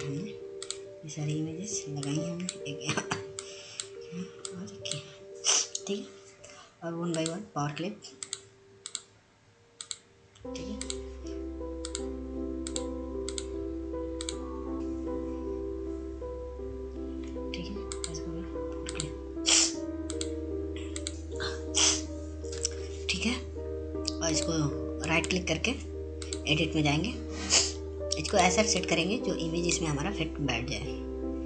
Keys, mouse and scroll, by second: 13.8 alt+a, 15.3 click, 22.2 click, 22.9-24.1 right drag, 24.1 click, 26.6-31.4 drag.